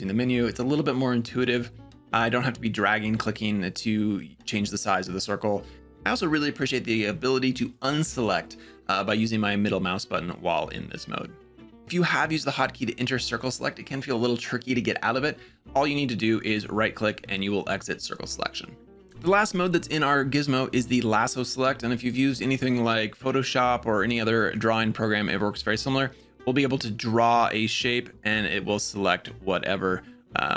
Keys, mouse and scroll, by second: 20.7-21.9 drag, 25.6-30.3 drag.